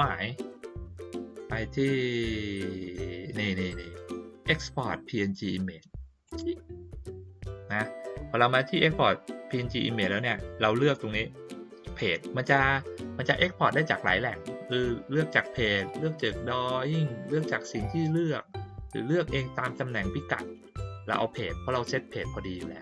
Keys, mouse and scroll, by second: 6.2 click, 15.8 click, 18.1 click, 19.1 click, 20.9 click.